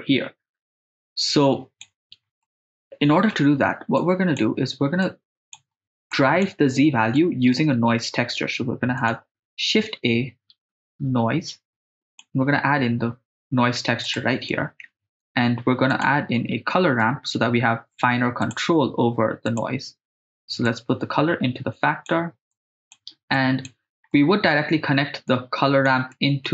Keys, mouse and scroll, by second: 2.4 middle click, 4.0 click, 5.1 click, 6.1 click, 7.2 middle click, 8.0 shift+a, 14.5 middle click, 15.1 shift+a, 20.9-22.1 drag, 22.5 click, 23.4 click, 24.1-24.5 middle drag, 25.3 click, 26.1 middle click.